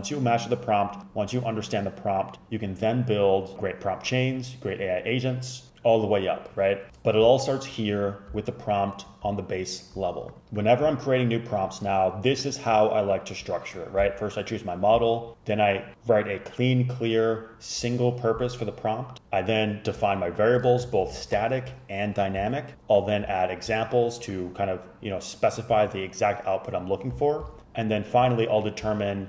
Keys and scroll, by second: 20.9 shift+Up, 21.1 shift+Up, 21.3 shift+super+Left.